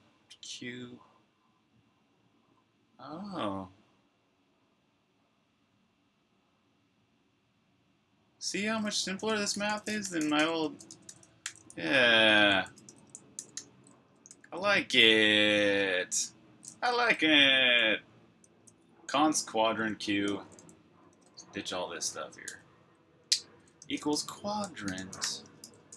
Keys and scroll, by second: 8.3-10.9 typing, 11.3 super+j, 13.1-13.8 typing, 14.2 super+k, 17.5 typing, 18.5 typing, 20.0-22.3 typing, 23.4-25.9 typing.